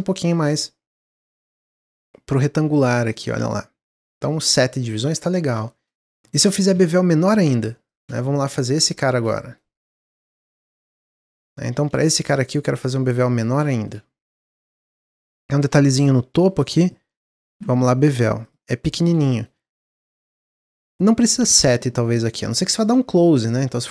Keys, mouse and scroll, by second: 0.6-3.7 shift+drag, 5.1 Tab, 5.6-6.0 shift+middle drag, 6.0 Tab, 6.8 alt+click, 7.8 alt+shift+click, 8.5 shift+click, 8.8-9.9 shift+middle drag, 9.9 shift+click, 11.0 shift+click, 11.3 middle click, 12.2 shift+click, 13.2 shift+click, 13.6 middle click, 14.2 shift+click, 14.4-15.4 middle drag, 15.4 shift+click, 16.7 shift+click, 17.5 ctrl+b, 18.6 middle click, 19.5 scroll up 1, 22.5 scroll down 5, 22.8-23.2 middle drag, 23.2-23.9 scroll up 1.